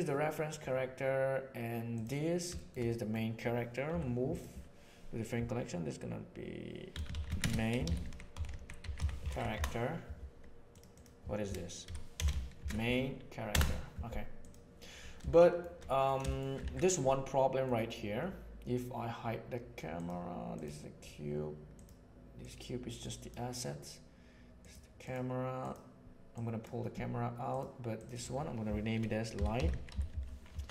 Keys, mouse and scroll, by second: 1.9 click, 2.5 shift+middle drag, 2.8 middle click, 3.9 m, 15.3 shift+middle drag, 16.2 shift+middle drag, 16.7 alt+a, 16.9-17.5 middle drag, 21.7 click, 23.0 drag, 24.5 click, 25.0 click, 25.5 click, 26.3 drag, 28.0-30.7 drag.